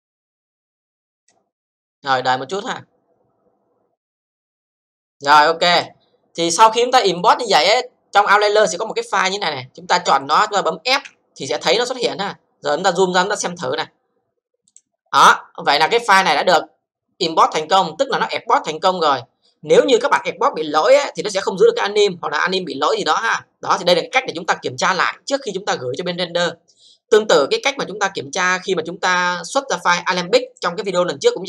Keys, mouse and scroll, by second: 5.7 click, 7.1 click, 9.2 click, 10.2 click, 11.0 f, 11.7-12.7 scroll down 5, 12.7 scroll up 1, 12.9 scroll down 2, 13.4 alt+click, 13.8 alt+c, 14.7 click, 18.8-21.0 scroll up 3, 30.5 click.